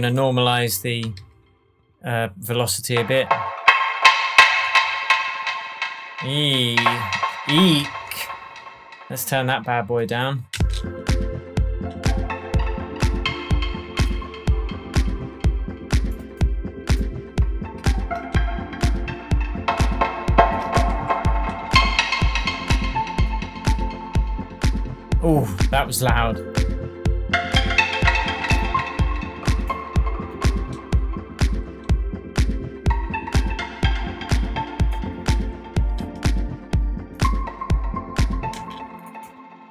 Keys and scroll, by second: 1.1 super+a, 7.8 shift+Tab, 10.5 space, 17.8 super+a, 20.9 shift+super+Tab, 21.6 shift+Tab, 38.5 space.